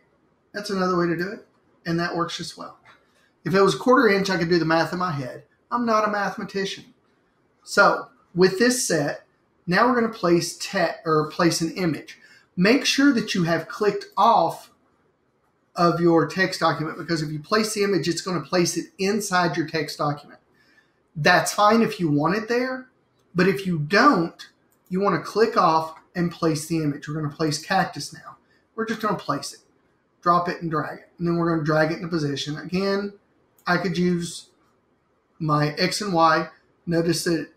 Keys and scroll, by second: 25.6 super+d.